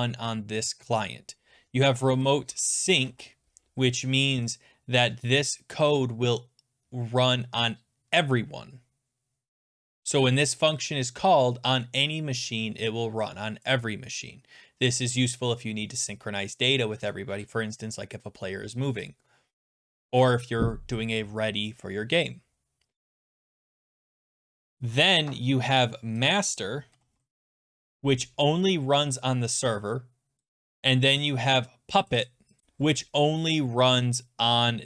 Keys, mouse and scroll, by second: 2.1 Right, 2.2-3.5 typing, 4.7 scroll down 7, 5.3 scroll down 4, 6.0 scroll down 1, 6.1 scroll, 6.9-8.1 scroll, 22.0 scroll, 22.7-24.8 scroll, 26.3 click, 26.4 click, 26.7-28.0 typing, 30.4 click, 31.3 click, 32.1 click, 32.3 click, 32.3-33.1 typing, 33.9 click, 33.9 click, 33.9 click, 34.0 click.